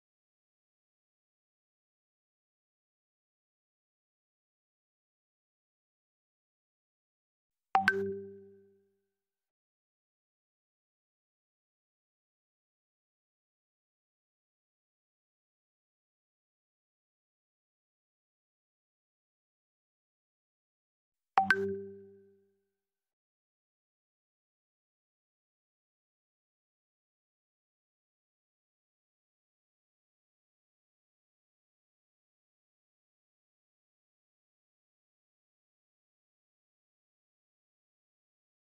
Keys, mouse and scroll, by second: 0.9-1.9 typing, 1.7 click, 4.1 shift+Page_Down, 5.0 click, 6.0-6.5 scroll down 1, 7.0 click, 8.4 right click, 10.1 click, 11.8 q, 12.3 click, 14.6 shift+Page_Down, 16.6 click, 17.4 f, 17.8 click, 18.6-19.9 scroll up 1, 19.9-20.8 scroll down 1, 20.8-21.7 scroll up 1, 21.7-22.1 scroll down 1, 22.5 click, 23.2-23.6 scroll up 1, 23.6 scroll down 1, 24.5-26.7 shift+drag, 26.7 scroll up 1, 27.1-27.8 scroll down 1, 28.2 click, 28.7-29.3 scroll up 1, 31.2 ctrl+c, 31.5-32.0 scroll down 1, 32.0-32.5 scroll, 32.5 click, 34.4-36.3 scroll up 1, 36.8 shift+Page_Down, 38.2 ctrl+z.